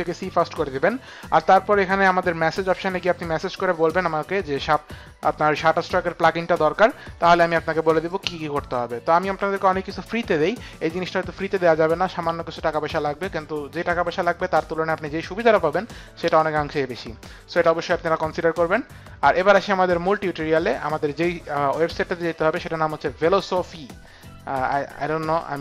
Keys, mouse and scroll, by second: 19.9 click.